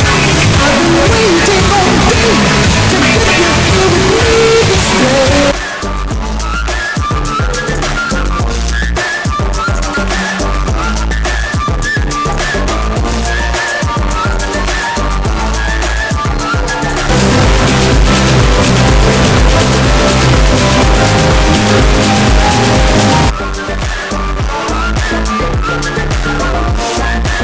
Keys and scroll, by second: 5.4 Page_Down, 23.5 Page_Down.